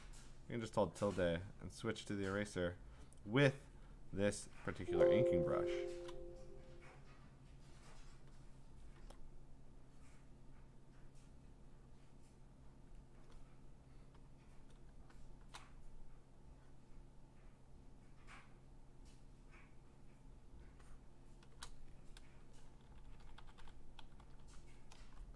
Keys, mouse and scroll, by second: 0.0-3.8 typing, 0.1 click, 1.0 click, 3.7 click, 4.7 alt+space, 5.1 click, 5.8 `, 5.9 click, 7.1 click, 8.1 click, 9.0 ctrl+z, 10.5 click, 11.5 click, 12.9 click, 14.5 click, 15.3 click, 15.3 click, 15.4 click, 17.3-21.4 click, 21.1 click, 21.5 click, 22.7 ctrl+-, 22.8 ctrl+-, 23.0 ctrl+-, 23.2 ctrl+-, 23.4 ctrl+-, 23.6 ctrl+-, 24.0 ctrl+=, 24.2 ctrl+=, 24.4 ctrl+=.